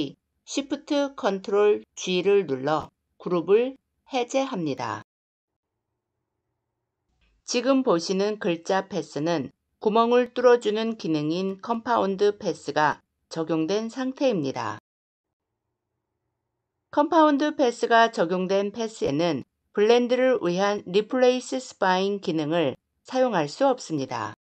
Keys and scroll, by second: 0.3 ctrl+shift+g.